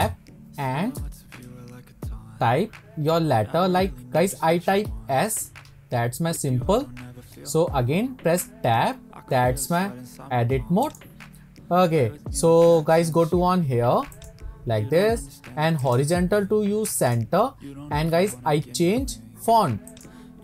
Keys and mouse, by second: 0.0 Tab, 1.0-1.7 typing, 4.9 shift+s, 8.3 Tab, 10.9 click, 16.0-17.2 drag, 19.9 click.